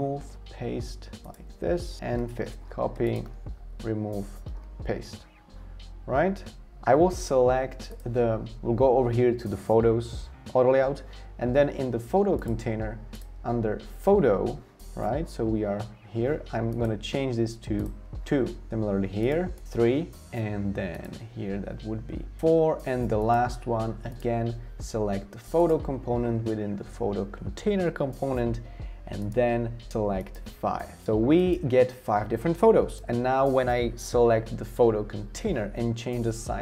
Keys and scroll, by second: 0.3 super+v, 2.5 super+c, 3.7 BackSpace, 4.4 super+v.